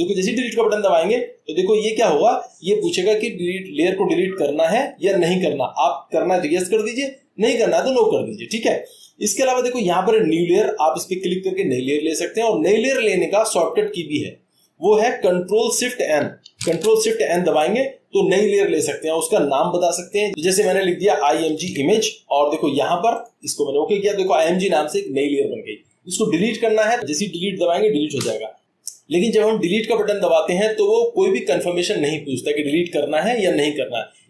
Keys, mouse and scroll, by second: 0.8 click.